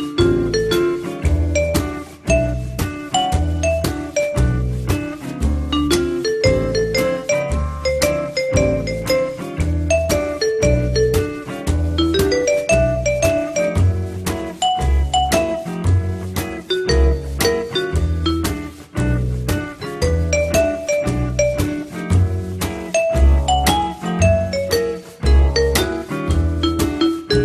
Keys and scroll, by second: 6.7 1, 19.0 ctrl+z, 23.9 F8.